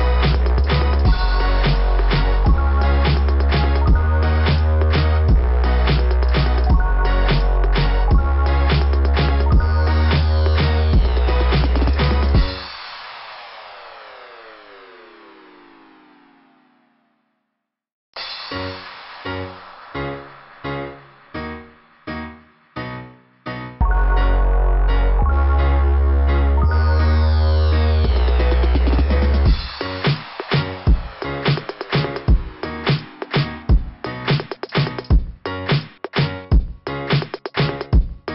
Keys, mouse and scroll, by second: 1.3 scroll down 2, 2.9 click, 3.0 click, 4.1 click, 7.8 click, 9.7 scroll down 2, 9.8 click, 12.0 click, 13.1 click, 15.0 scroll up 2, 15.3-15.7 scroll down 2, 15.8 scroll up 1, 18.0 click, 18.2 click, 18.4 click, 18.5 click, 18.7 click, 18.9 click, 19.0 click, 22.7 click, 23.1 click, 23.2 click, 23.4 click, 23.6 click, 23.7 click, 23.9 click, 24.1 click, 24.2 click, 24.4 click, 28.6 click, 28.8 click, 28.9 click, 29.1 click, 29.2 click, 29.4 click, 29.6 click, 29.7 click, 29.9 click, 30.1 click, 30.2 click, 30.4 click, 30.6 click, 30.7 click, 30.8 click, 30.9 click, 32.7-34.0 scroll up 10, 36.1 scroll down 2.